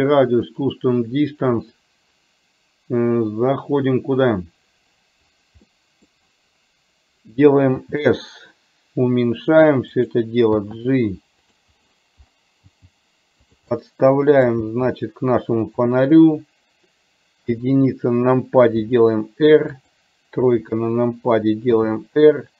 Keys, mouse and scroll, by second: 0.6 click, 5.7 middle click, 7.8 s, 10.6 g, 12.7 g, 13.8 middle click, 16.6 g, 17.4 KP_1, 18.9 r, 20.6 KP_3, 21.8 r.